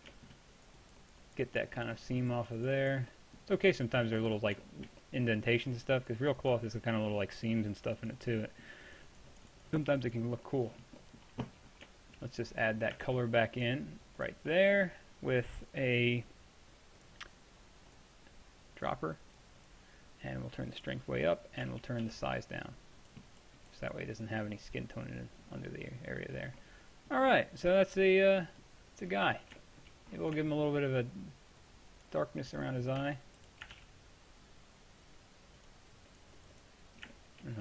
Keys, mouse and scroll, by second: 0.6-2.1 middle drag, 3.2-8.7 middle drag, 8.7-11.9 drag, 13.6-15.2 drag, 17.0-22.7 drag, 22.1 f, 22.8-23.4 drag, 26.1-28.0 middle drag, 28.5 middle click, 28.8-29.8 middle drag, 31.7 click, 33.1 f, 33.8 shift+f, 35.7-37.2 drag.